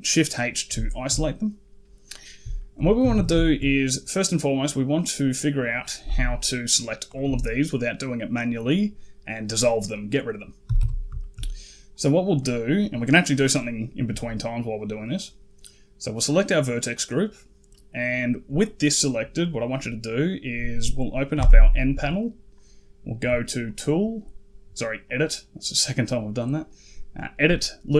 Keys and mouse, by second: 0.7 shift+middle click, 2.0 click, 2.4 shift+click, 2.8 a, 3.0 a, 3.3 shift+click, 6.9 alt+click, 10.5 a, 10.6 a, 11.0 shift+click, 16.0-19.0 drag, 21.2 n, 23.5 click, 27.4 click.